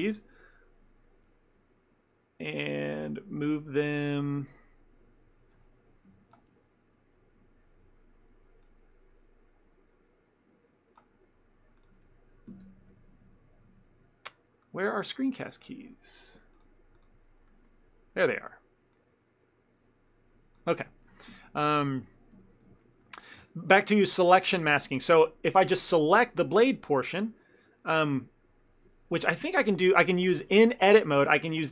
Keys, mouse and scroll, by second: 17.6 middle click, 19.0 click, 21.7 ctrl+middle click, 22.4 n, 22.9 ctrl+middle click, 23.3 middle click, 23.5 ctrl+middle click, 25.0 middle click.